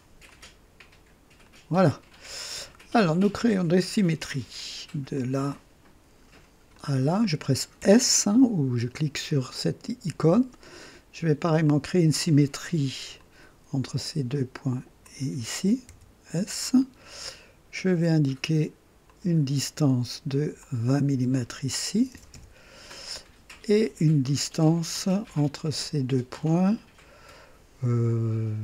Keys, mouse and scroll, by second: 0.2 click, 1.4 click, 2.4 right click, 3.7 click, 5.1 click, 6.7 click, 7.8 s, 11.6 click, 13.1 click, 15.0 click, 15.9 s, 17.7 click, 19.0 click, 20.6 click, 21.8 KP_2, 22.1 KP_0, 22.3 Return, 25.2-28.6 drag.